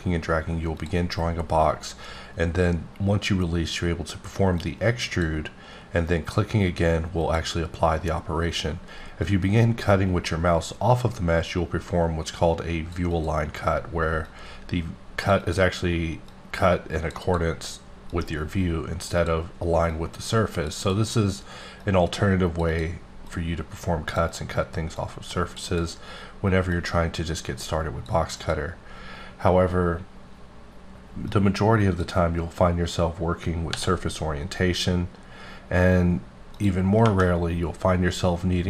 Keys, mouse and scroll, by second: 0.7 click, 4.6 click, 7.3 click, 9.2 click, 13.1 double click, 14.2 click, 15.4 double click, 16.3 click, 17.2 double click, 18.1 click, 19.1 double click, 19.9 click, 20.8 double click, 21.8 click, 22.6 double click, 23.3 click, 24.3 double click, 25.0 click, 25.7 double click, 26.7-28.3 drag, 28.3 click, 31.3 click, 33.7 b, 34.8-36.1 scroll down 8, 36.5 click.